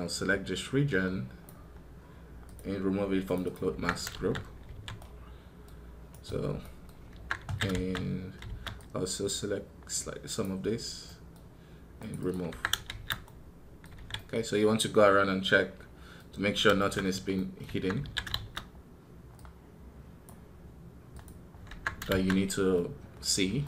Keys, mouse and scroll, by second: 5.9 right click.